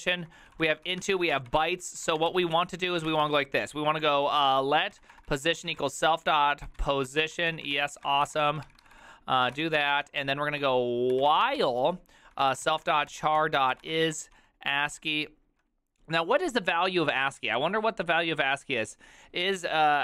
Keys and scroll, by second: 0.0-14.9 typing, 1.7 ctrl+d, 1.9 ctrl+d, 15.0 ctrl+n.